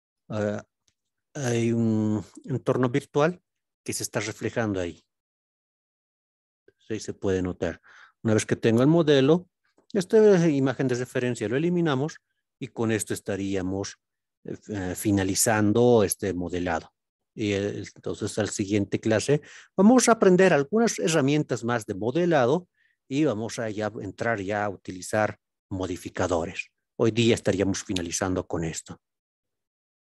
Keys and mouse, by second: 12.5-13.1 middle drag, 13.6-14.1 shift+middle drag, 14.9-15.3 middle drag, 15.8-16.3 shift+middle drag, 22.6-23.2 middle drag, 24.7 click, 25.2 click.